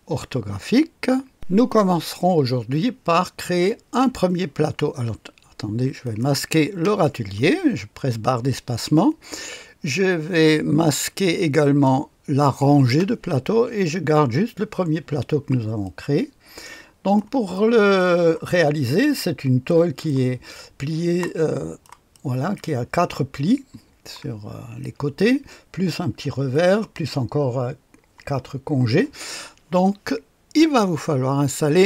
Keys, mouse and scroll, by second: 1.3 click, 6.0 click, 6.8 space, 11.6 click, 12.8 space, 15.8-17.2 drag, 17.5-18.5 right drag, 18.6-20.0 scroll up 1, 19.6-20.7 right drag, 20.7-21.2 scroll down 1, 21.2-23.2 drag, 24.2-24.8 scroll down 1, 24.8 right click, 26.5-27.5 drag.